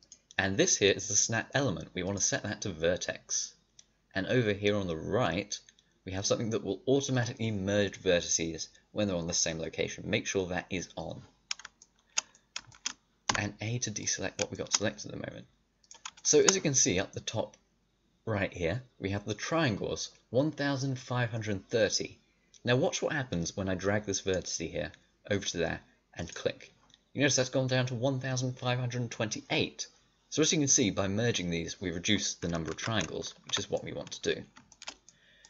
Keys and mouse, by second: 11.9 middle click, 13.2 a, 14.6 click, 15.7-23.3 drag, 32.7 ctrl+z, 33.0 click, 33.4 a, 35.3 middle click.